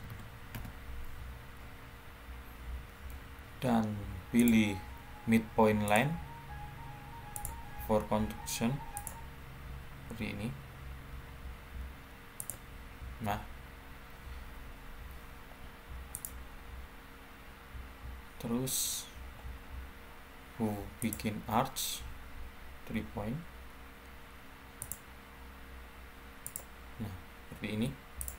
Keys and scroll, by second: 0.4 Return.